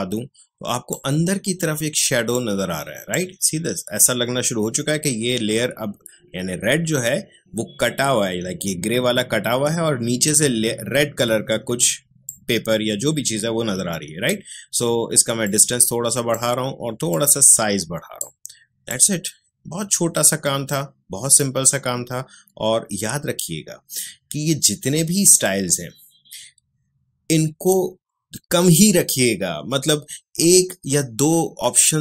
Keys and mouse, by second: 12.2-24.6 drag.